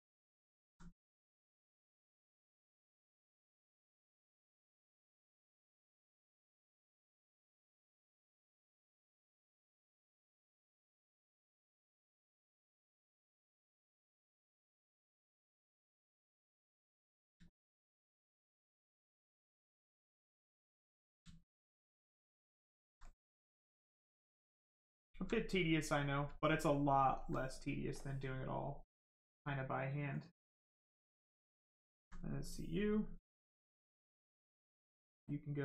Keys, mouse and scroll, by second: 0.2 alt+click, 3.4 click, 7.4 click, 11.0 right click, 12.4 alt+right click, 15.4 alt+click, 16.6 alt+click, 17.6 alt+click, 18.1 right click, 20.1 shift+click, 21.2 alt+right click, 22.4 alt+click, 23.6 click, 25.0 alt+right click, 25.6 right click, 25.7 right click, 26.3 alt+right click, 26.9 alt+click, 27.9 click, 30.4 click, 31.9 alt+right click, 33.2 right click, 33.3 click.